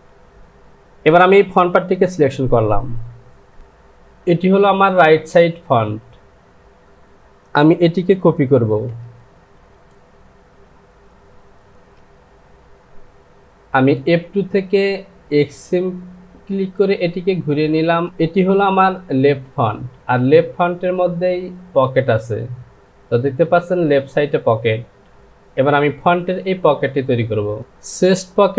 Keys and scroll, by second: 2.9 Home, 8.6 ctrl+c, 11.8 j, 18.8 Home.